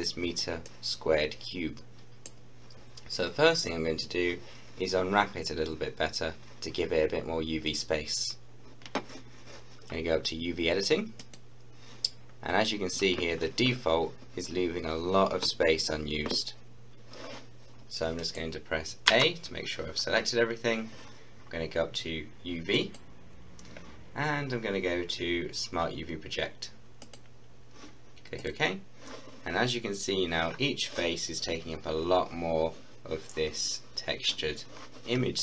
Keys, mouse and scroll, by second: 11.2 click, 12.1 scroll down 1, 12.8-14.6 scroll up 1, 17.9 scroll up 1, 18.2 middle click, 19.1 a, 22.7 a, 22.8-25.4 drag, 27.1 click.